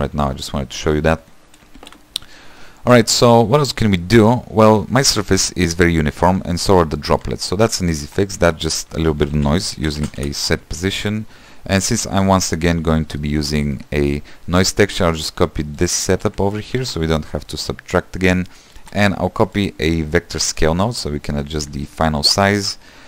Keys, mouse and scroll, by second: 0.1 x, 3.6 shift+middle click, 3.9-4.3 scroll up 3, 4.3 middle click, 5.0 space, 5.6 space, 5.8-12.3 shift+middle drag, 12.3 s, 17.1 shift+d, 22.0 click.